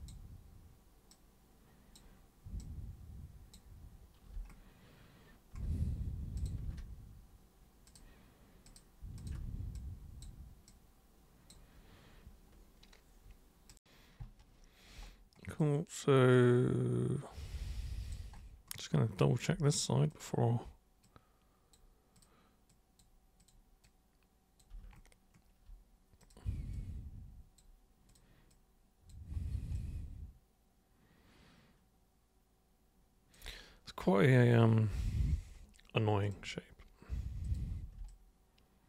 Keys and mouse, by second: 1.1 super+click, 2.6 super+click, 6.4 super+click, 7.9 ctrl+shift+super+click, 8.7 ctrl+shift+super+click, 9.2 ctrl+shift+super+click, 9.7 super+click, 10.7 super+click, 13.7 click, 15.5-18.1 alt+drag, 20.1 click, 21.0 click, 22.1 click, 22.6 super+click, 23.3 super+click, 23.8 super+click, 26.2 super+click, 26.7 super+click, 28.1 super+click, 28.5 super+click, 29.7-33.3 alt+super+drag, 36.2 super+click, 37.4 super+click, 38.0-38.8 alt+super+drag.